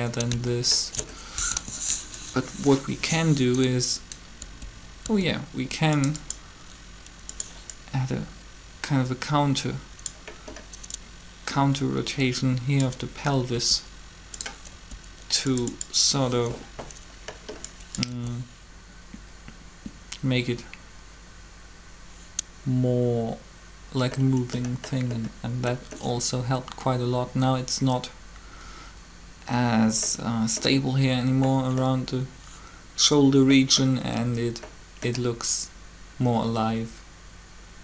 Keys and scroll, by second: 1.5 alt+shift+3, 4.4 r, 5.0 r, 13.5 r, 14.5 r, 18.1 alt+a.